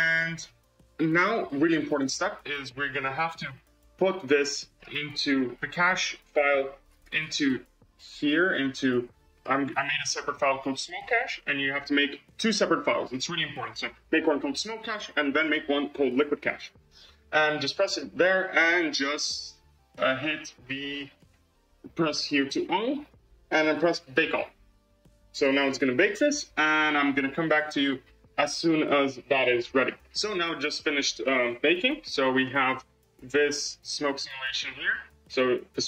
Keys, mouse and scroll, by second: 2.4-4.9 drag, 18.2-18.8 scroll up 11, 19.3-21.0 scroll down 18, 21.0-23.0 drag, 23.8-29.9 drag, 31.4-32.2 shift+middle drag, 32.2 space.